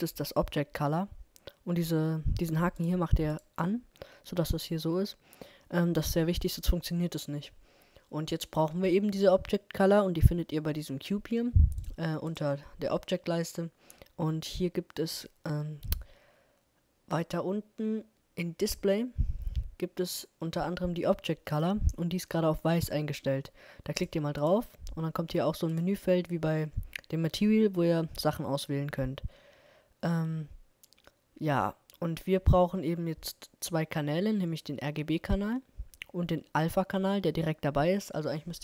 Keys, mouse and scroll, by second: 2.8-5.2 drag, 8.4-10.4 middle drag, 12.3-14.6 drag, 24.4-27.4 drag.